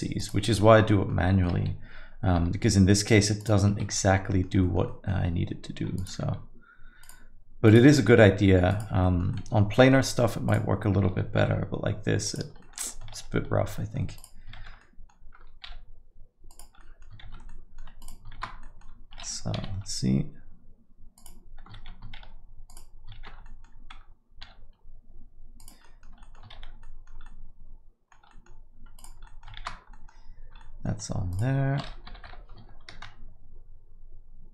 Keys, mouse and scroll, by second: 0.6 alt+middle click, 0.8 middle click, 1.2 alt+middle click, 2.3 g, 3.9 alt+middle click, 4.6 middle click, 4.8 alt+middle click, 5.9 click, 6.4 g, 7.6 click, 7.9 g, 9.0 middle click, 9.3 alt+middle click, 9.7 middle click, 10.0 alt+middle click, 10.5 click, 11.4 g, 12.6 alt+middle click, 12.9 middle click, 13.1 shift+z, 13.7 alt+middle click, 14.5 shift+z, 14.8 alt+middle click, 15.6 g, 16.8 middle click, 17.2 shift+z, 17.5 alt+middle click, 18.0 click, 18.3 shift+z, 18.6 alt+middle click, 19.5 g, 22.2 shift+z, 22.7 click, 23.2 shift+z, 23.4 alt+middle click, 24.4 g, 25.8 middle click, 26.2 alt+middle click, 26.6 shift+z, 26.8 middle click, 27.2 alt+middle click, 28.3 middle click, 28.9 click, 29.2 alt+middle click, 29.5 shift+z, 29.9 alt+middle click, 30.6 alt+middle click, 31.3 click, 32.0 g.